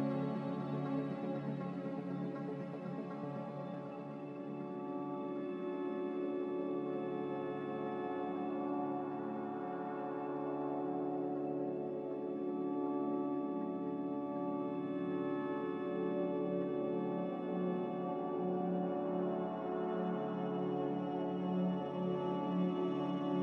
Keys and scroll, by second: 5.3 5, 7.9 2, 8.0 Return.